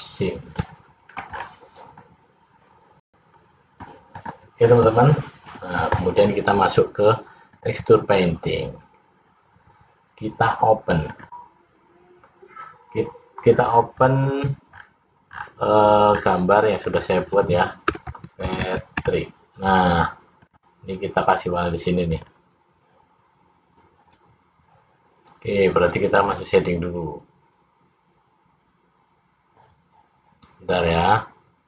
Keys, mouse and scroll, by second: 0.7 middle click, 1.5-2.1 scroll down 5, 2.1 middle click, 4.3 click.